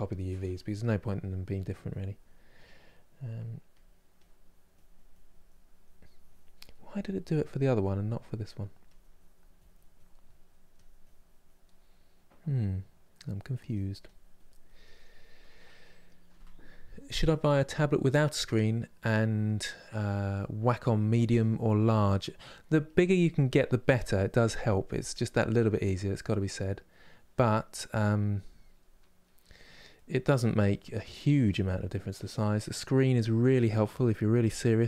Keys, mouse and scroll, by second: 1.2-3.5 drag, 3.8-6.4 drag, 6.4-8.5 middle drag, 8.5-9.9 drag, 9.9 middle click, 10.4-11.6 drag, 11.6-13.0 middle drag, 13.0-21.8 drag, 21.8 middle click, 22.5 click, 23.1 middle click, 23.7 click, 24.6-31.9 middle drag, 31.9-34.8 drag.